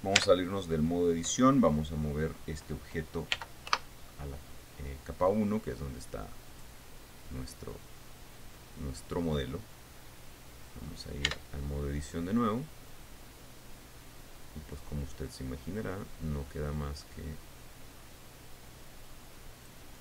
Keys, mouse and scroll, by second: 0.8 Tab, 3.9 m, 4.2 1, 7.0 click, 11.9 Tab, 13.4-20.0 drag.